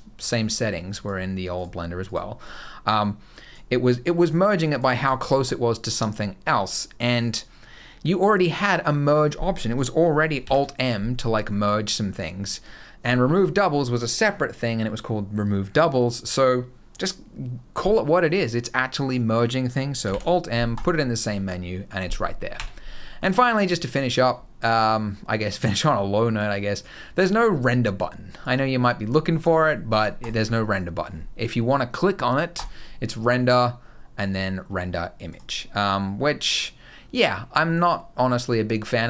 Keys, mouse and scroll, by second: 1.3 click, 1.8 click, 2.2 click, 3.8 click, 4.4 click, 10.2 alt+m, 19.8 alt+m, 22.3 Tab, 22.6 scroll down 1, 22.8 middle click, 23.1 scroll down 2, 26.1 click, 28.2 click, 29.2 click, 29.7 click, 30.0 click, 32.3 click.